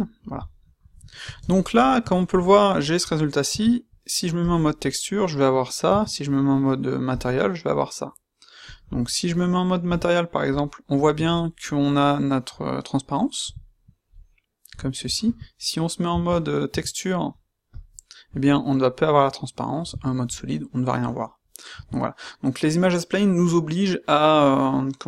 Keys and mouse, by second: 0.6-1.4 middle drag, 3.5 z, 5.8 z, 8.6-9.2 drag, 9.8 s, 13.4 a, 15.2 a, 16.6 z, 19.8 z, 21.7 z.